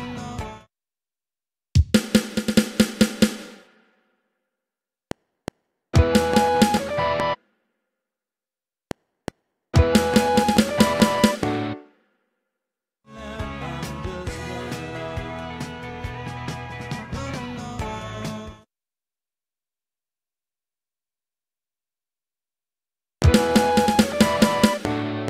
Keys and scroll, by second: 0.4 space, 4.0 Right, 4.9 F7, 7.3 space, 8.7 F7, 11.7 space, 12.5 ctrl+shift+Left, 13.0 space, 18.4 space, 23.1 space.